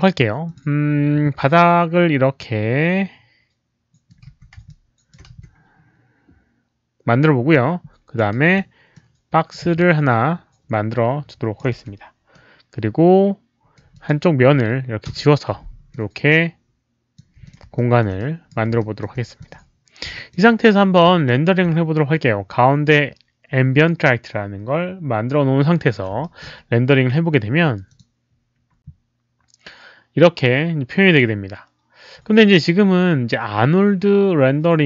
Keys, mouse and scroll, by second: 0.4 click, 1.2 r, 1.5-4.1 middle drag, 4.3 w, 4.7 alt+click, 5.3 w, 7.2 click, 8.4 r, 8.9 middle click, 9.7-11.6 alt+drag, 11.7 q, 12.4-13.7 right drag, 13.7-14.4 typing, 13.9 alt+click, 13.9 middle click, 15.0 Delete, 15.9-17.1 alt+drag, 17.4 click, 17.7 alt+click, 18.1 right click, 18.8 alt+click, 19.4 click, 20.1 alt+click, 21.2 alt+middle click, 25.8 alt+click, 25.8 right click, 26.2 alt+middle click, 27.9 click.